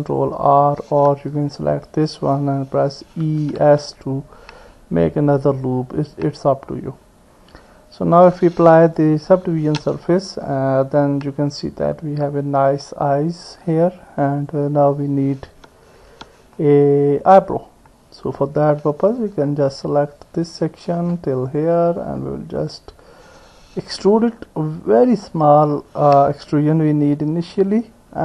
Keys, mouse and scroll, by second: 3.2 e, 9.4 Tab, 10.5-12.9 middle drag, 14.4 click, 16.1 Tab, 16.6 middle click, 19.1 click, 20.1 click, 21.5 ctrl+click, 22.0 middle click, 22.0 click, 22.7 middle click, 25.1 e.